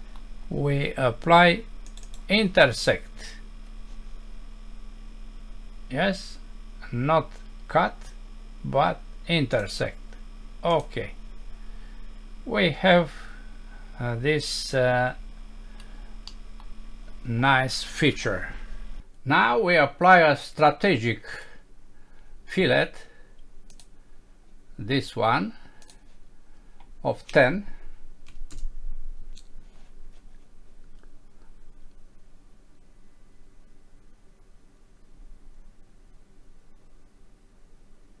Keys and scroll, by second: 16.3 F6.